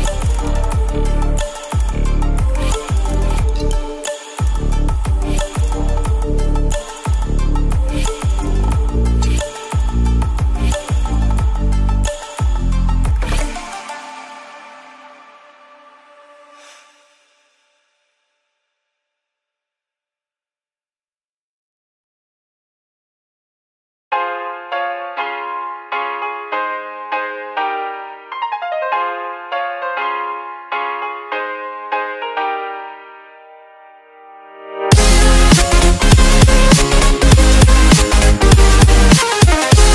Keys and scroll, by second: 1.6 F1, 17.8 F7.